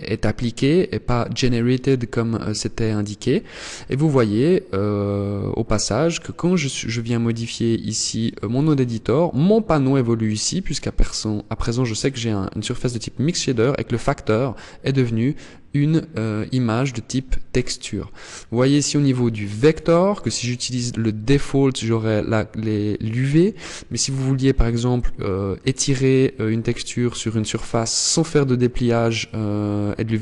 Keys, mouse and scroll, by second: 5.9 click, 6.9 click, 7.8 click, 18.9 click.